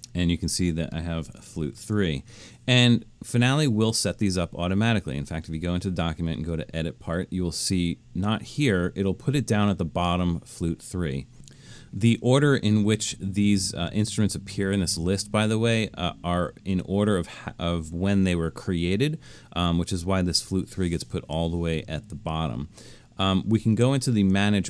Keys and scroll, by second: 1.7 super+=.